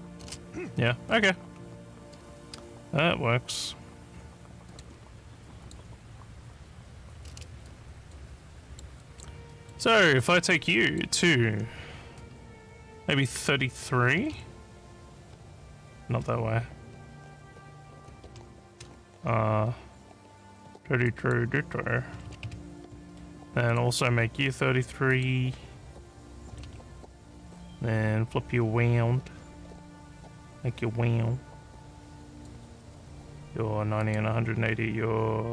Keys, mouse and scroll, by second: 2.0 click, 4.7 click, 5.6 click, 7.7 alt+click, 8.5-8.8 alt+scroll up 1, 9.0 alt+click, 9.5 alt+middle click, 10.8 click, 21.0 click, 23.6 click, 25.1 click, 32.3 click, 34.0 click.